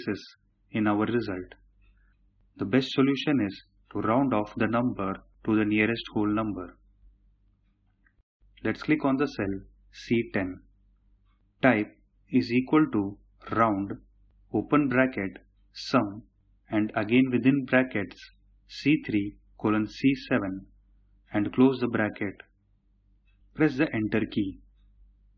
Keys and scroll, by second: 12.4 typing, 23.4 Return.